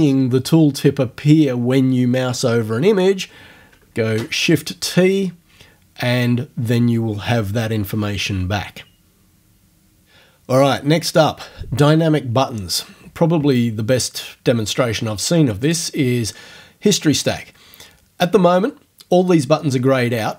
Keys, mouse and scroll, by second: 4.1 shift+t, 15.7 click.